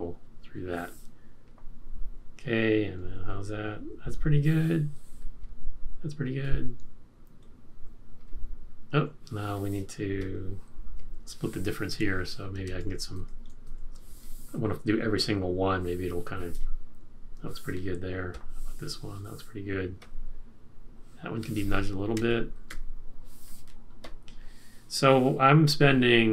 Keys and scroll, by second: 5.4 •, 6.6 •, 11.9 F6, 12.8 shift+Right, 13.1 shift+Right, 13.7 shift+Right, 22.2 F6, 22.7 Right.